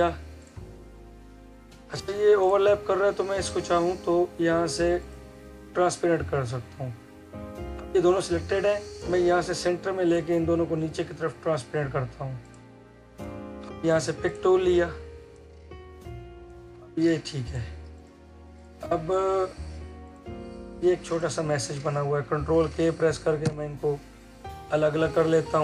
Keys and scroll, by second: 23.3 ctrl+k.